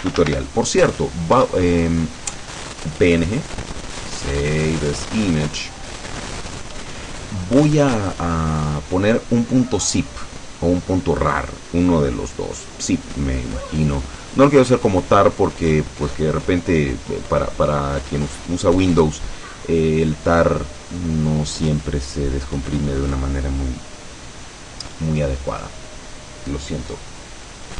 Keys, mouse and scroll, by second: 0.0-0.9 typing, 1.5 Return, 6.4 click.